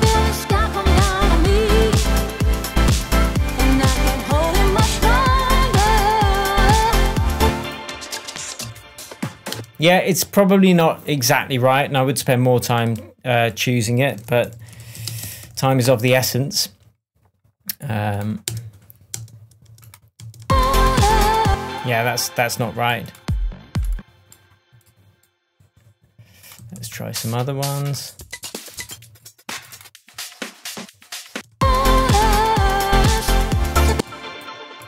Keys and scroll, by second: 7.3 space, 8.6 Down, 9.5 space, 14.1 super+r, 14.4-15.9 typing, 18.4 space, 26.5 Right, 26.7 Down, 31.3 space, 33.9 space.